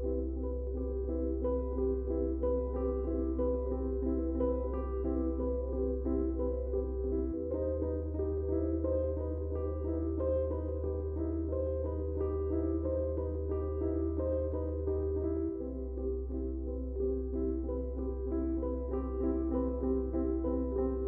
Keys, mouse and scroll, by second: 3.3 click, 7.1 click, 7.6 ctrl+], 8.0 click, 9.9 click, 12.0 click, 18.3 click.